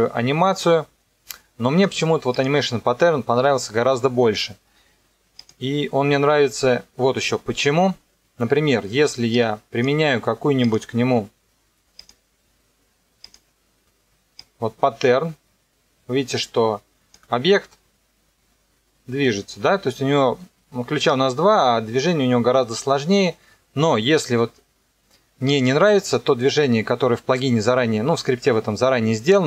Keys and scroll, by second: 17.5 KP_0, 20.3 space.